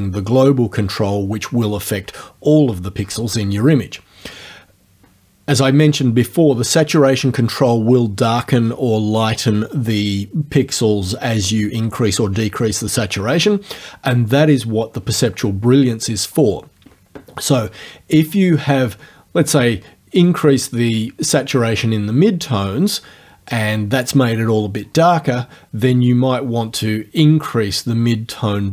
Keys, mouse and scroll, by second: 20.3-23.7 drag, 27.2-28.7 drag.